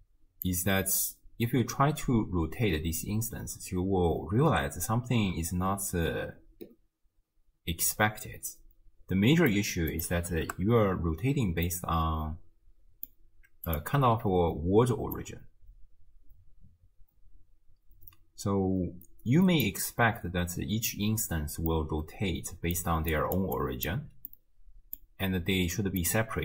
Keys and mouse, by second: 0.5-9.5 drag, 9.9 click, 11.7-13.1 middle drag, 13.7 click, 14.1 m, 15.2-19.7 drag, 21.8-22.8 middle drag, 22.8-23.6 d, 23.1 click, 23.9 d, 24.0 d, 24.1 d, 24.3 middle click, 26.0-26.4 drag.